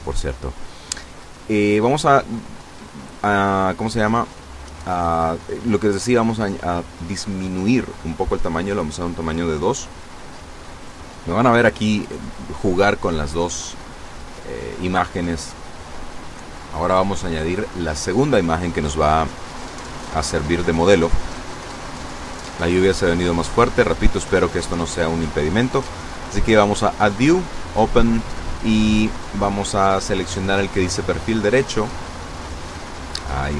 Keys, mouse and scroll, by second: 4.8 click, 6.4 KP_2, 6.5 KP_Enter, 8.7-9.2 scroll up 2, 12.1-14.6 drag, 24.4 click, 24.9-25.7 scroll down 2, 26.4 click, 30.2 click, 31.4 click, 32.9-33.5 scroll down 2.